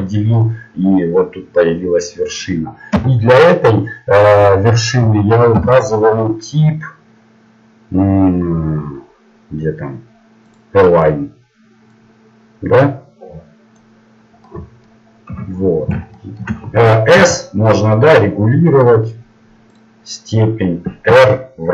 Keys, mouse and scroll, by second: 0.3-1.6 right drag, 11.9-13.8 drag, 14.0 middle click, 15.3 KP_1, 17.2 s, 21.1 r.